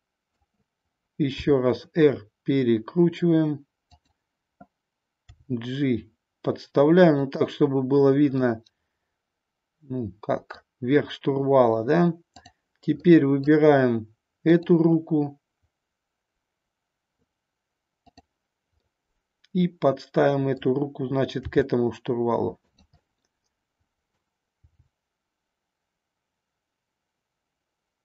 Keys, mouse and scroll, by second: 1.3 r, 5.3 g, 7.2 click, 8.4-10.7 middle drag, 13.1 scroll up 1, 13.2 middle click, 18.8-20.6 middle drag, 21.3 g, 22.7 click, 23.1-24.2 middle drag, 24.5 g.